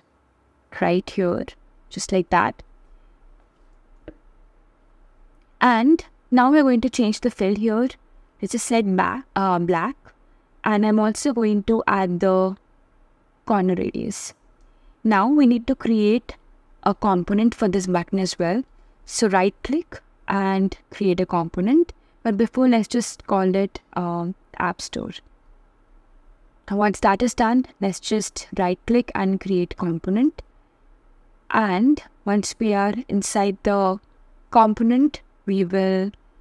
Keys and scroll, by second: 21.7 shift+a, 23.4 shift+s, 31.0 shift+b.